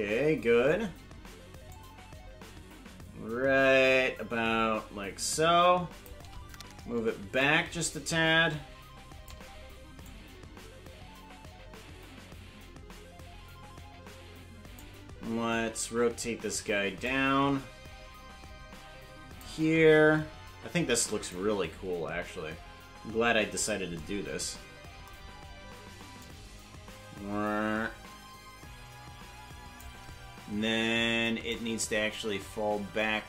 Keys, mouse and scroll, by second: 1.7-6.1 shift+drag, 7.4-9.3 shift+drag, 10.1-14.8 drag, 17.0-19.5 shift+drag, 21.3-23.6 drag, 26.3-29.9 drag, 31.5-33.2 shift+drag.